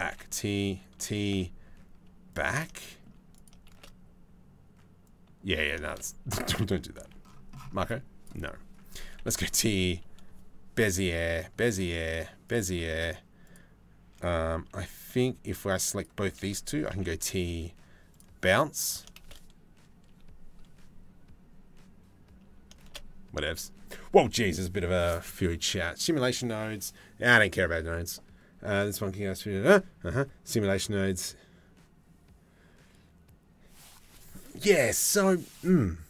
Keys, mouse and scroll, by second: 0.9 t, 2.9 click, 3.3 shift+space, 4.6 click, 4.7 middle click, 5.5 shift+space, 6.6 c, 8.8 t, 13.0 click, 14.3 c, 16.5 t, 18.4 click, 18.8 shift+space, 22.4 shift+space.